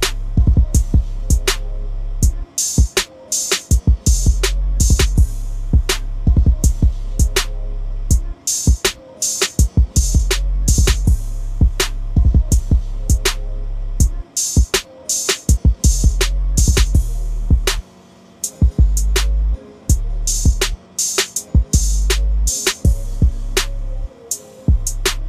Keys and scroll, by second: 3.1 shift+BackSpace, 8.7 ctrl+z, 15.8 ctrl+d.